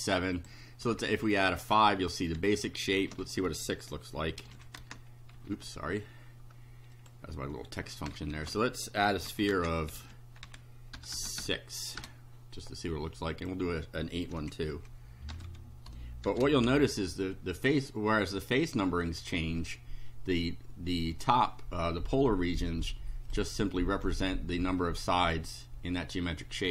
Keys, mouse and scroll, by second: 0.4 click, 3.0 Home, 4.4 ctrl+c, 4.5 ctrl+End, 4.8 ctrl+Return, 5.4 Page_Up, 7.0 click, 7.8 Up, 8.3 Home, 9.1 ctrl+c, 9.3 ctrl+End, 9.6 ctrl+Return, 10.0 ctrl+v, 10.5 ctrl+Home, 11.0 ctrl+BackSpace, 13.4 click, 14.4 Left, 14.7 Delete, 15.3 BackSpace, 15.5 6, 16.3 shift+0, 16.6 shift+F5, 18.8 shift+right click, 23.3 click, 23.6 right click, 24.3-25.5 drag.